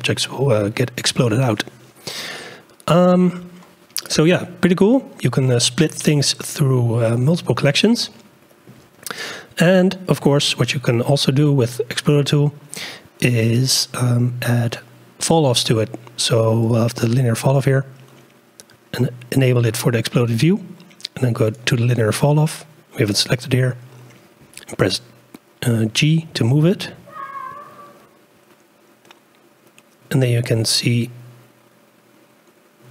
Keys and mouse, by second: 2.4 click, 4.0-7.1 drag, 7.9-8.7 shift+drag, 11.9 click, 15.3 click, 26.2 g.